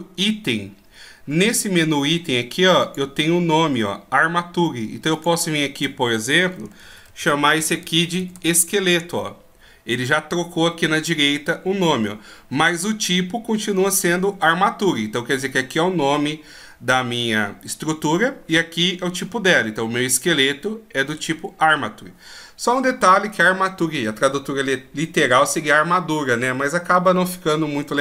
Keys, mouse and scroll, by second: 2.7 click.